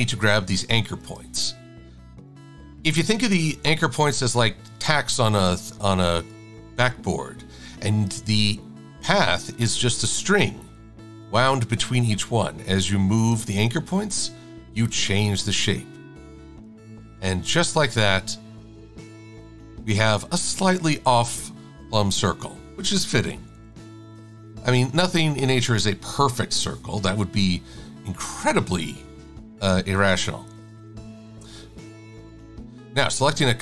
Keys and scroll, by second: 23.6 super+-.